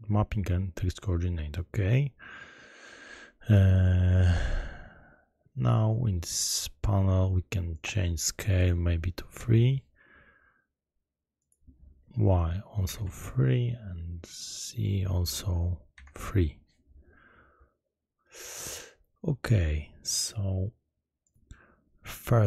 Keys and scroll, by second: 9.5 Return, 13.0 Return, 16.2 Return.